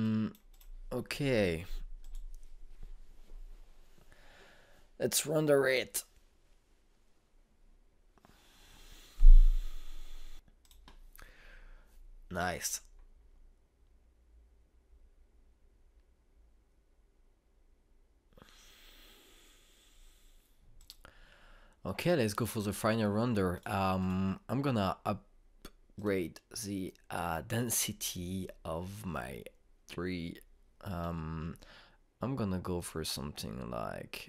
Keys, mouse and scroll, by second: 0.5 click, 11.6 click, 21.8 click, 24.6 click.